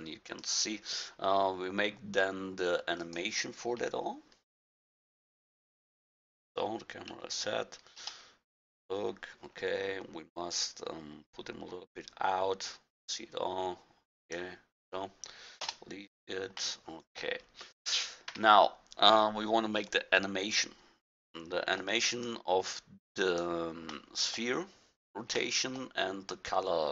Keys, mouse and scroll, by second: 1.4-3.0 middle drag, 3.8 KP_1, 7.1 KP_1, 8.0 KP_0, 15.6 KP_0, 18.3 a, 23.2-24.2 drag, 23.6-24.1 right drag, 24.2 middle click, 24.3-24.8 drag, 24.8 middle click, 24.9-25.7 drag, 25.7 middle click, 25.8-26.9 drag.